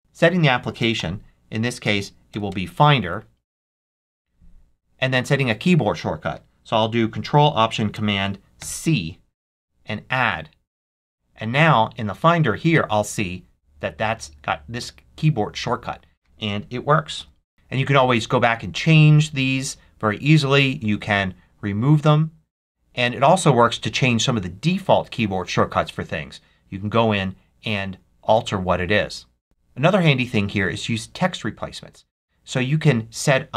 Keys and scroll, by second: 0.9 f, 2.2 Down, 2.9 Down, 3.4 Return, 8.5 ctrl+alt+super+c, 17.1 ctrl+alt+super+c.